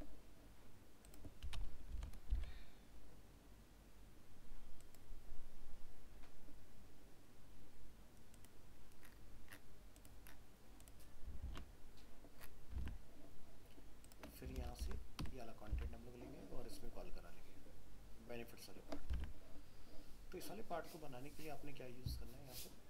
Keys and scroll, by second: 11.4 ctrl+s, 12.8 alt+Tab, 14.6 ctrl+a, 14.8 ctrl+c, 15.8 alt+Tab, 19.2 alt+Tab.